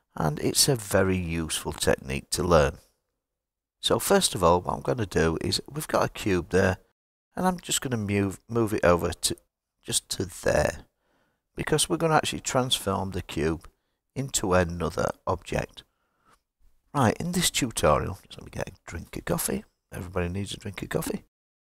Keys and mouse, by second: 4.5 click, 7.6 g, 9.5 x, 10.6 click.